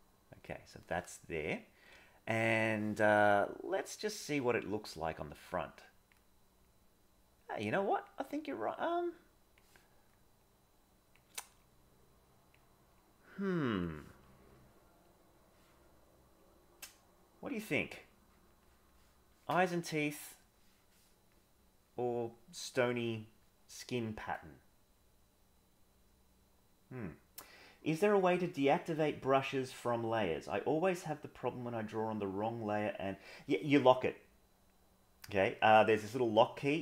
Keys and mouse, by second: 1.8 middle click, 3.1 middle click, 4.6-6.1 drag, 6.7-8.0 drag, 8.4-9.5 drag, 10.4 click, 11.7 click, 13.0 click, 15.4-18.3 middle drag, 20.4 middle click.